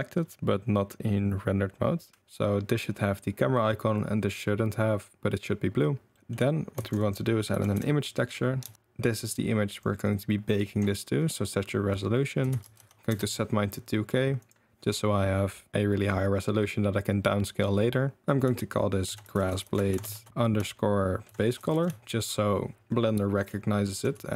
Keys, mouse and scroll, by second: 6.1 drag, 6.9 shift+a, 9.1-23.5 drag, 19.6 s, 23.9 g.